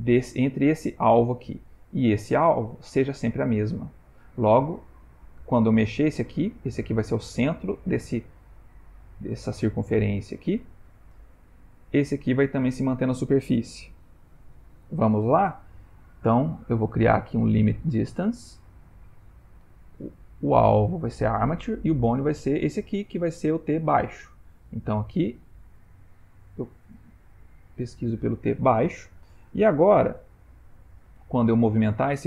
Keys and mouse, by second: 0.4 click, 0.8 g, 2.3 click, 4.4 click, 9.3 shift+middle click, 12.0 click, 16.6 click, 20.1 click, 22.3 click, 25.7 click, 31.5 click.